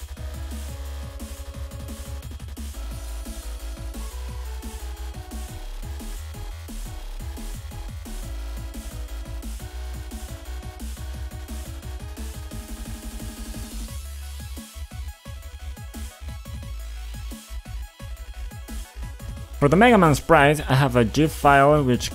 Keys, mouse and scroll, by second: 0.4 click, 0.7 click, 2.8 F5, 3.7 F4, 4.6 click, 5.4 click, 6.0 d, 6.4 d, 7.4-11.8 typing, 14.0 click, 14.1 ctrl+alt+*, 19.3 click.